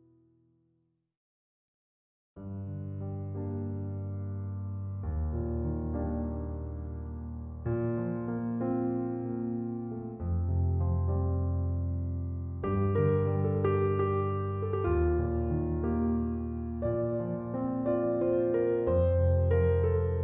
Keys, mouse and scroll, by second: 14.3 1, 14.8 0, 15.1 Return.